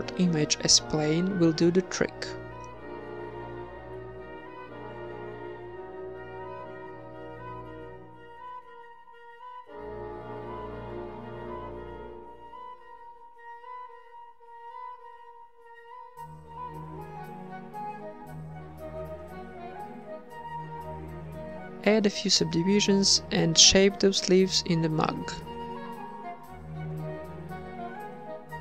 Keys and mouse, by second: 0.0-1.0 drag, 1.0-3.9 middle drag, 1.4 z, 2.7-4.9 typing, 5.9 Tab, 6.3 w, 8.7 t, 8.8 Tab, 9.2 middle click, 11.1 click, 15.2 click, 15.6-18.9 typing, 18.5 Tab, 20.7 Tab, 20.7 t, 21.5 Tab, 21.7 2, 22.8 w, 23.9 Tab, 24.1 right click, 24.2 Tab, 24.5 Tab, 25.1 z, 26.3 g, 27.0 h, 28.3 click, 28.5-28.6 typing.